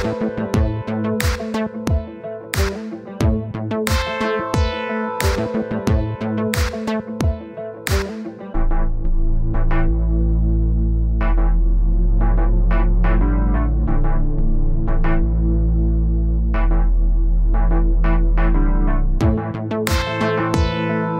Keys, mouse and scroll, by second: 0.5 click, 2.2-4.1 middle drag, 8.3 middle click, 9.0 click, 9.6-12.2 middle drag, 12.4-15.4 middle drag, 16.4-21.1 drag.